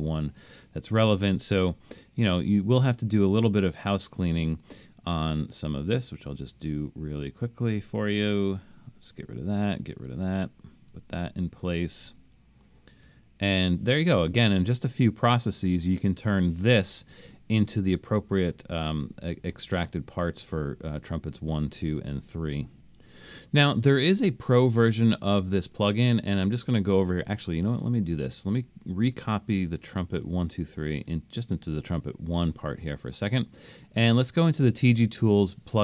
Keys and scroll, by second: 0.8 BackSpace, 1.6 BackSpace, 4.2 BackSpace, 6.5 BackSpace, 9.3 BackSpace, 10.2 BackSpace, 13.1 BackSpace.